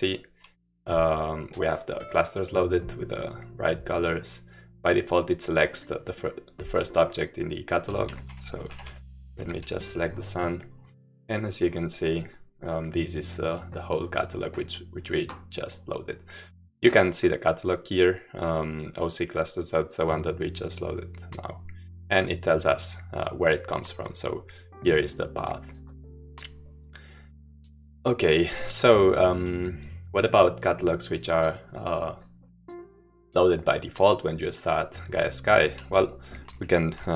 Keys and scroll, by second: 8.2-9.4 typing, 9.4 Escape.